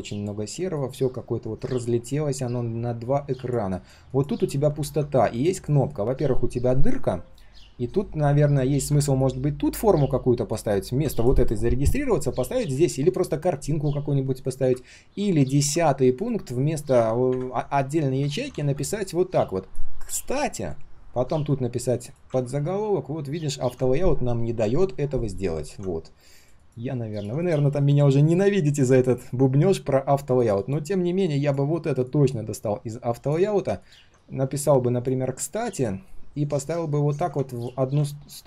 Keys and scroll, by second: 15.0 ctrl+z, 15.4 ctrl+z, 22.3 ctrl+z, 25.6 ctrl+z, 28.2 alt+l, 34.0 ctrl+shift+g.